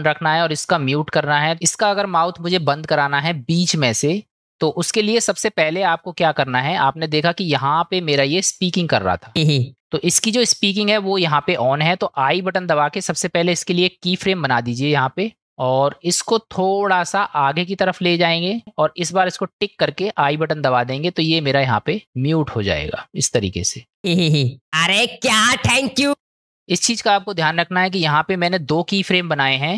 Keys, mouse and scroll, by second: 6.6 middle click, 8.6-9.2 drag, 9.3 space, 9.7 click, 9.7 space, 19.7 click, 24.0 space, 26.1 space, 26.4-28.0 middle drag.